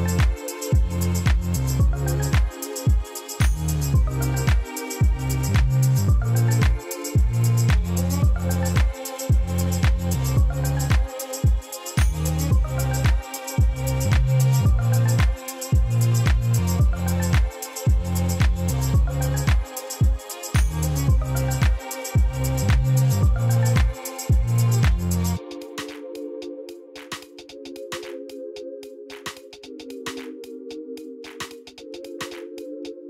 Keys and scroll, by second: 8.0 Tab, 8.7 shift+s, 15.5 shift+a, 18.1 g, 18.3 z, 19.5 Tab, 20.3 3, 21.1 g, 21.4 z, 23.7 i, 24.8 e, 26.0 i, 28.8 e.